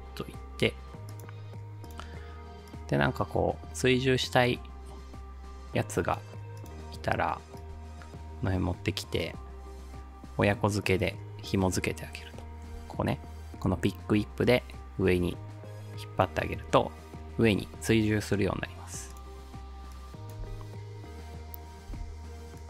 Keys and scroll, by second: 20.5 ctrl+alt+space, 21.5 space, 21.9 space.